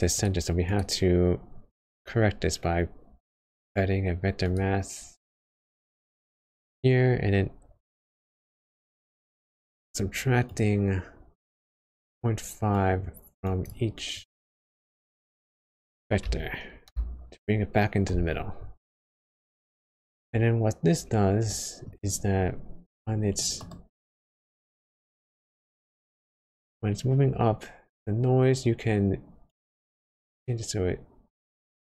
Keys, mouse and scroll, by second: 0.6 click, 1.4 shift+a, 7.5-8.1 scroll up 8, 8.1 middle click, 9.3 scroll up 1, 10.5 click, 12.7 click, 21.5 middle click, 22.1-22.6 scroll up 2.